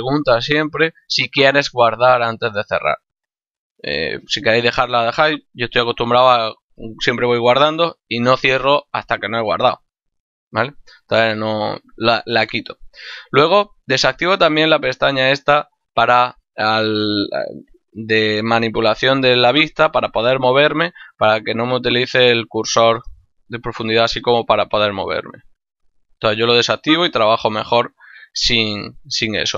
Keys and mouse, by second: 14.0 click.